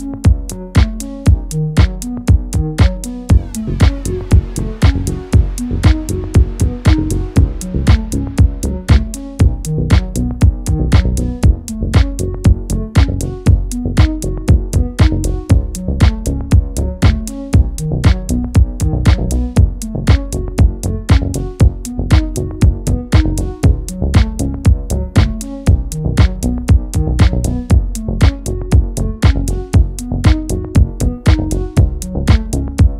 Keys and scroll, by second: 15.6 Up, 15.8 Up, 16.3 shift+Up, 20.8 space, 21.1 space.